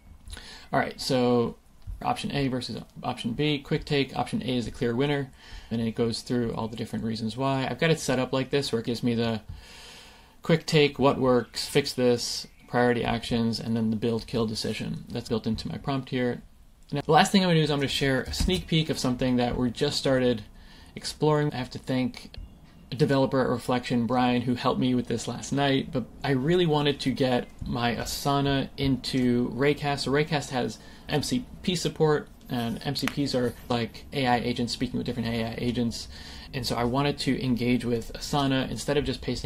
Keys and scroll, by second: 18.3 shift+super+i, 22.3 super+n.